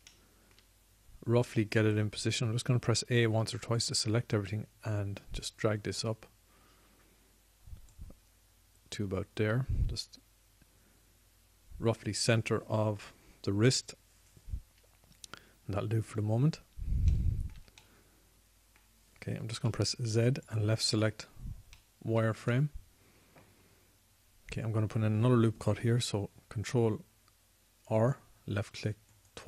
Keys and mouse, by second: 3.7 a, 4.0 a, 19.1-20.8 drag, 20.8 z, 21.8 z, 24.4-27.1 middle drag, 27.1 ctrl+r.